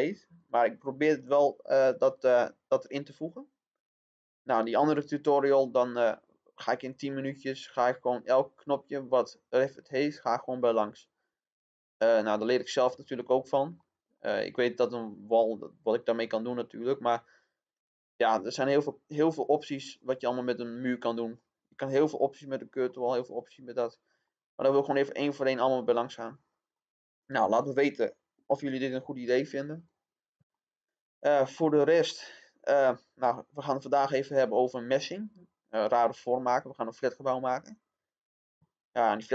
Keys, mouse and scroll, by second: 0.3 click, 2.8 click, 4.9 scroll down 1, 6.5 middle click, 8.1-9.2 drag, 12.2-12.7 scroll down 1, 13.3-13.7 scroll down 1, 13.7-26.3 middle drag, 29.7 click, 30.5 middle click, 31.7-32.5 scroll down 1, 34.5 click.